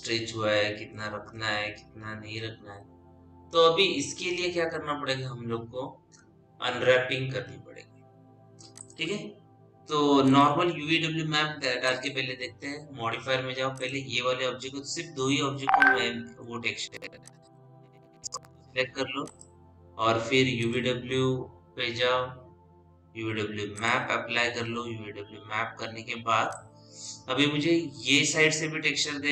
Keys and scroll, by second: 23.8 u.